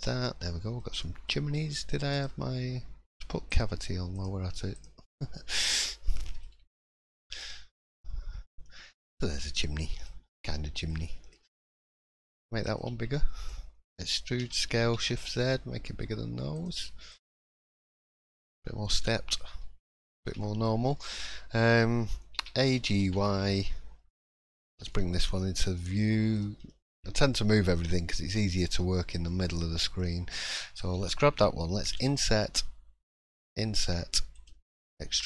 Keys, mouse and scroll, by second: 0.4 middle click, 1.0 shift+middle click, 2.1 click, 5.8 shift+middle click, 6.5-6.9 scroll down 2, 6.9 shift+middle click, 7.4-7.9 scroll up 1, 7.9 middle click, 8.6 shift+middle click, 8.9 scroll up 2, 9.3 middle click, 10.1-10.5 scroll down 2, 10.5 middle click, 11.0 shift+middle click, 11.3-12.1 scroll up 4, 12.6 alt+click, 13.1 shift+middle click, 14.0 e, 17.1 click, 17.5 scroll down 2, 17.7 middle click, 19.6 shift+middle click, 19.9-20.2 scroll down 2, 20.4 shift+middle click, 21.3 shift+middle click, 22.3 a, 22.7 g, 24.9 shift+middle click, 25.3-25.7 scroll up 2, 25.7 middle click, 26.3 click, 26.6 shift+middle click, 27.2 click, 29.3 middle click, 30.0 scroll down 1, 30.5 click, 31.0 shift+middle click, 31.9 i, 33.5 i.